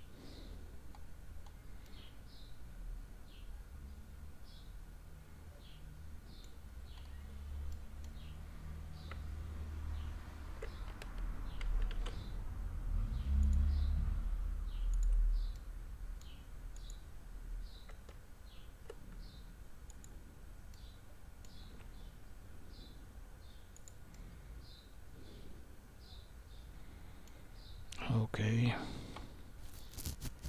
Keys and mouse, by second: 1.8-6.4 middle drag, 7.7 middle click, 9.1 Tab, 11.9 ctrl+r, 15.5 middle click, 16.7 click, 18.1 Tab, 19.9 click, 20.7 middle click, 21.7 s, 24.1-27.3 middle drag.